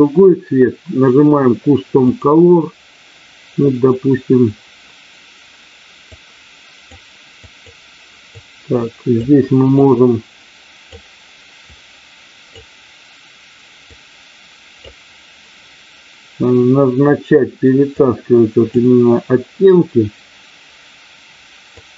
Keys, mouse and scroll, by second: 5.9 click, 7.6 click, 9.8-10.9 drag, 11.6 click, 13.8 click, 17.9 click, 21.8 click.